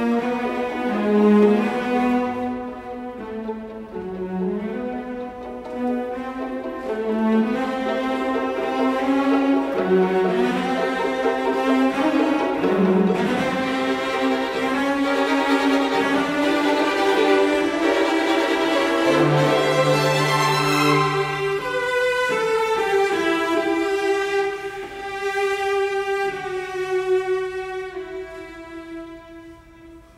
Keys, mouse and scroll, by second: 6.2 Escape, 7.7-8.9 typing, 9.1 Return, 11.0 Escape, 12.3 Delete, 14.9 ctrl+g, 16.5 middle click, 20.9 Escape, 24.4 Escape.